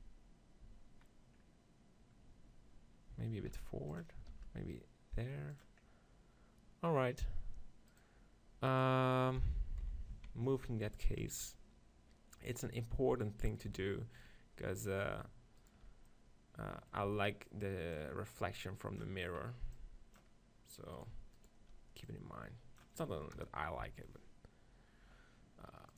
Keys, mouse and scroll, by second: 0.7 z, 3.5 shift+f, 4.4 shift+f, 5.6 right click, 5.8-7.4 drag, 7.4 middle click, 8.0-9.9 right drag, 9.9 click, 9.9 KP_7, 10.1 z, 10.5 middle click, 11.2 ctrl+KP_7, 12.9-14.6 middle drag, 13.8 z, 15.7-21.6 drag, 17.3 z, 21.0 right click, 21.7 middle click, 21.7-23.3 right drag, 22.1-23.9 drag, 22.1-23.3 middle drag, 23.5 KP_0, 23.9 z.